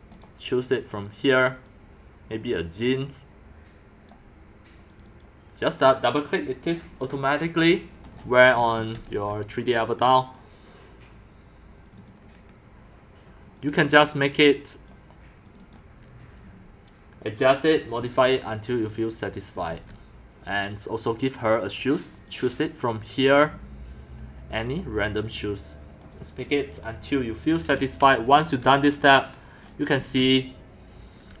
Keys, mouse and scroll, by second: 0.4 click, 0.6-0.9 right drag, 1.8-2.6 drag, 5.3 click, 6.7 click, 7.8-8.3 scroll, 8.3-9.5 typing, 9.0 click, 10.4 click, 12.1 click, 12.4 Delete, 13.7-14.6 drag, 15.4 click, 15.6 click, 19.7 c, 20.1 click, 20.6-23.0 right drag, 24.8 click, 26.5 click, 27.7 scroll, 28.4 c, 29.7 click, 30.0-31.4 typing, 30.9 click.